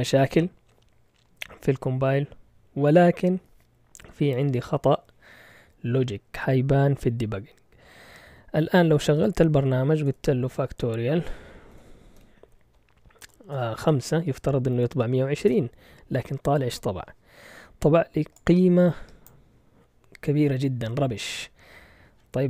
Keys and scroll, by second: 9.4-10.3 typing, 11.7-12.1 typing, 13.2-13.9 typing, 15.2-16.0 typing.